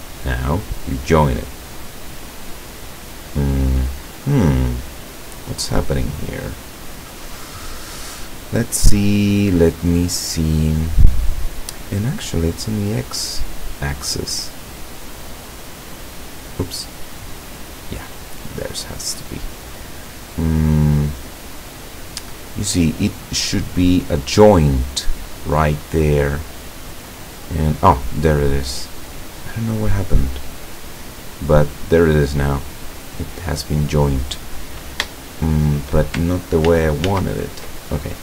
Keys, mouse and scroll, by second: 4.3 middle click, 5.0 scroll up 1, 6.3 scroll up 1, 12.1-15.4 drag, 15.9 click, 16.4 click, 17.3 click, 17.7 click, 18.7-24.1 drag, 24.2-25.9 middle drag, 25.9 scroll up 1, 26.7-28.6 drag, 28.6-30.6 middle drag, 31.0-33.5 drag, 33.5 middle click, 35.1 shift+middle click, 36.8 ctrl+z.